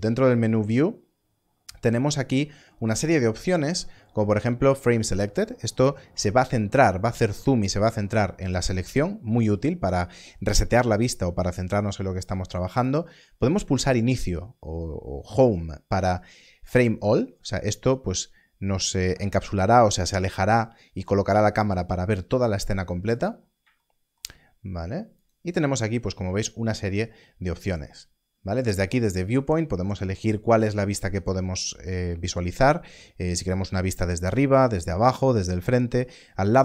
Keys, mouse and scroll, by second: 1.4 click, 17.5 click, 22.9 scroll up 1, 25.2 click.